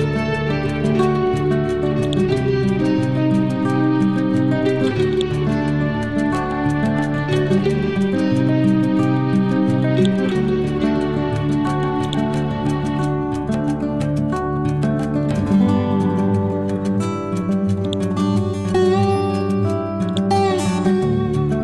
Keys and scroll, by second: 0.5 Up, 7.0 Down, 14.8 Right, 18.3 Down, 19.0 Right, 19.6 Down.